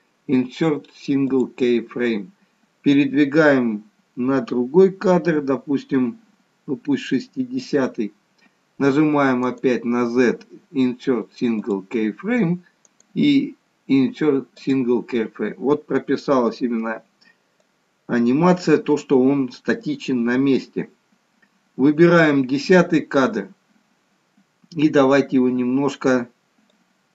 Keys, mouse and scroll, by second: 3.0 click, 9.4 right click, 12.8 right click, 17.6 click, 26.6 click.